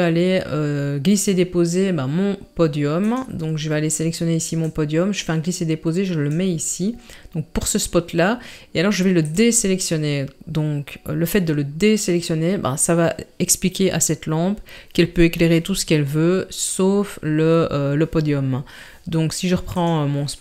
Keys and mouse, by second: 3.1 click, 4.7 click, 5.0 click, 9.3 click, 19.8 click.